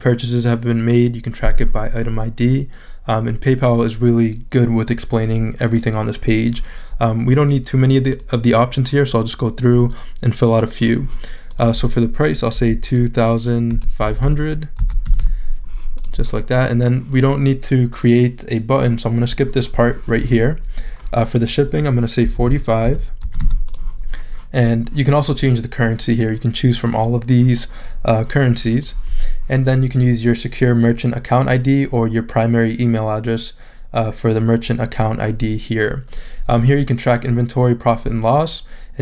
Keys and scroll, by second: 12.5 2, 13.7 5, 14.0 0, 14.8 •, 15.1 0, 22.0-23.7 typing.